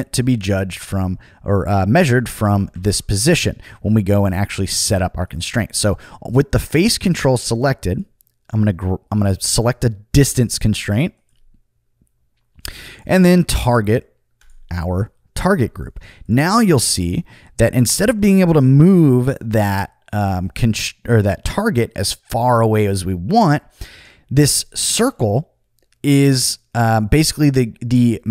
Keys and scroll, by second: 2.7 super+z.